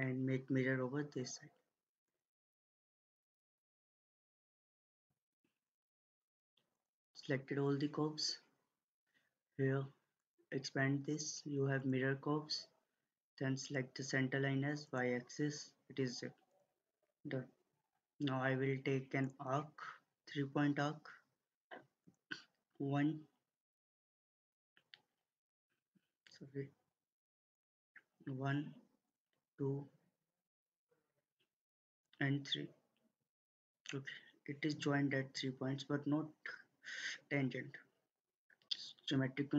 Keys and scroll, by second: 25.8 Escape.